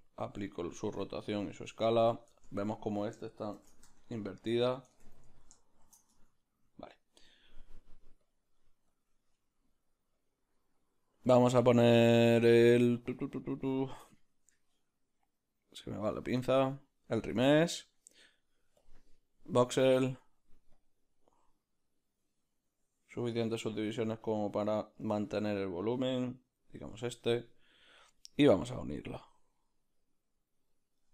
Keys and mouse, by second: 0.5 ctrl+a, 1.9 right click, 2.5 Tab, 2.7 a, 3.6 shift+n, 4.0 Tab, 4.4 right click, 5.0 Tab, 5.9 shift+n, 6.3 Tab, 17.3-31.1 drag.